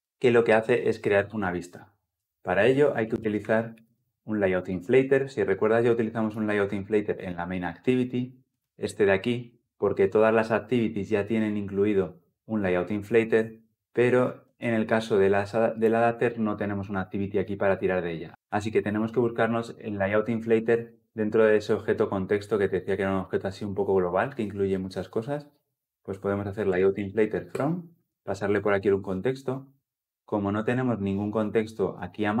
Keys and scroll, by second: 4.5 Return, 27.4 Return, 27.9 ctrl+p.